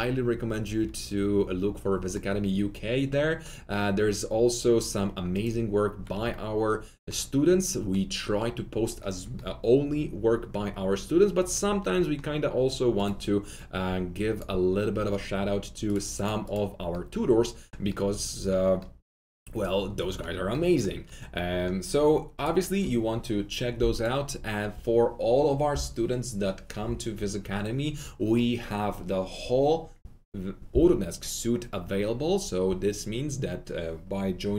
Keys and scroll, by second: 6.1 typing, 6.2 Escape.